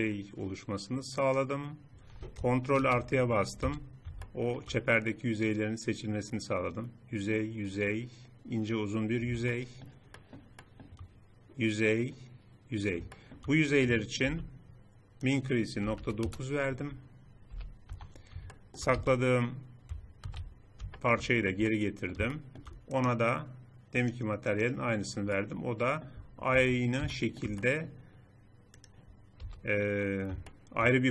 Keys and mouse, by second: 2.5 ctrl+KP_Add, 3.4 z, 9.2-11.8 middle drag, 13.1 middle click, 14.0 n, 17.2 n, 17.7 Tab, 18.9 z, 20.0 alt+h, 25.4 middle click, 26.3 Tab, 29.2 a.